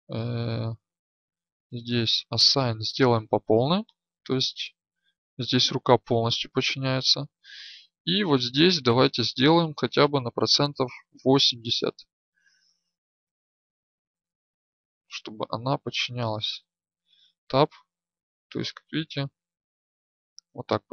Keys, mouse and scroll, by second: 3.4 Tab, 3.4-6.5 drag, 6.5 Tab, 8.3 right click, 17.1 Tab, 17.1-20.9 drag.